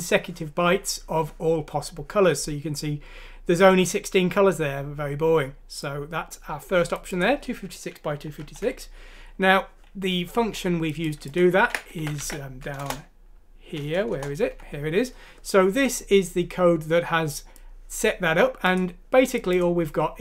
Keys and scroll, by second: 8.6 Home, 11.5 ctrl+c, 12.0 ctrl+f, 12.2 ctrl+v, 12.7 Return, 12.9 Return, 14.2 Return, 14.6 Escape.